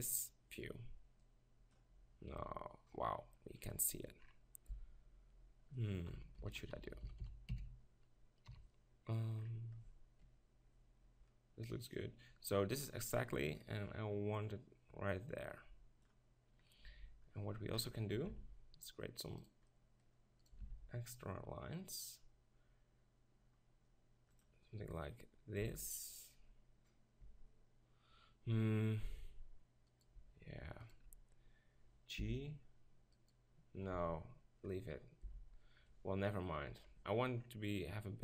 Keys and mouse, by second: 0.0-1.2 middle drag, 1.2-3.0 drag, 2.4-3.0 middle drag, 4.7 z, 6.1 KP_1, 6.3-7.2 KP_4, 7.5 KP_4, 8.4 KP_6, 10.2 KP_6, 11.9-16.9 drag, 16.9 Tab, 17.8-19.5 middle drag, 18.3 ctrl+r, 19.5 click, 20.7 ctrl+r, 25.6 Tab, 29.9 Tab, 32.2 g, 34.0 Tab, 34.7-35.3 middle drag, 35.3 z, 36.7 KP_7.